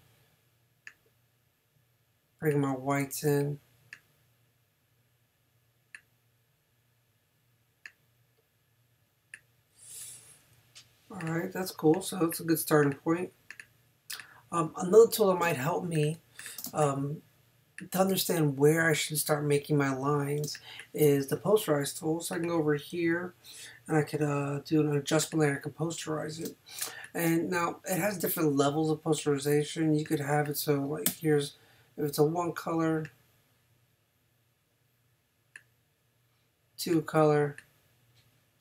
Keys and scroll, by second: 15.4 space, 16.6 space, 20.4 space, 26.5 space, 31.1 i.